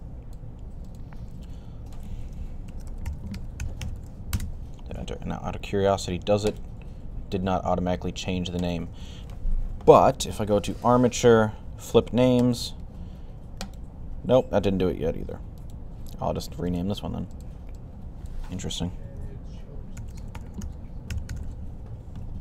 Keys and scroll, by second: 2.3-4.2 typing, 19.6-21.8 typing.